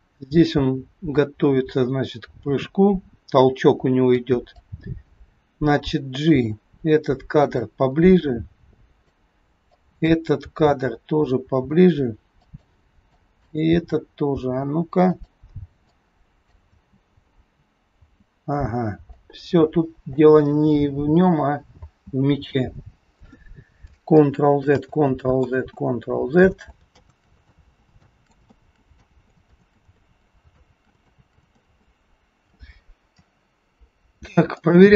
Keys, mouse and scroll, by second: 4.4 click, 6.3 g, 8.3 click, 9.7 click, 10.4 g, 13.0 click, 13.8 g, 15.8 click, 16.7 space, 18.2 space, 19.2 click, 20.8 space, 21.9 space, 24.2 ctrl+z, 24.8 ctrl+z, 25.4 ctrl+z, 26.4 ctrl+z, 26.9 ctrl+z, 27.4 ctrl+z, 28.0 ctrl+z, 28.4 ctrl+z, 28.9 ctrl+z, 29.6 ctrl+z, 29.9 ctrl+z, 30.6 ctrl+z, 31.2 ctrl+z, 31.6 ctrl+z, 34.7 click.